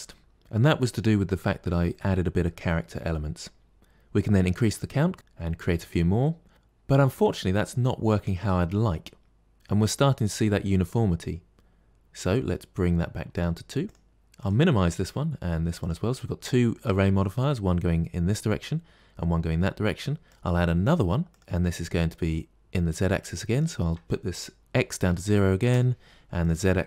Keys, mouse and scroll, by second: 5.1 click, 6.1-8.8 middle drag, 13.2 click, 14.3 click, 14.7 scroll up 2, 15.7 click, 20.1-21.4 drag, 23.4-26.8 drag.